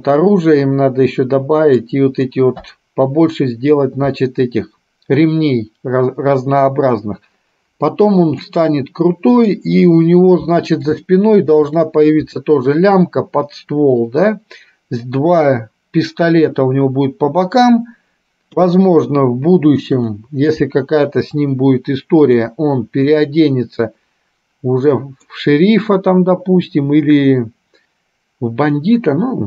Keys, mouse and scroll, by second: 8.6-9.8 middle drag, 11.1 shift+middle click, 18.6 KP_3, 23.3-25.5 middle drag.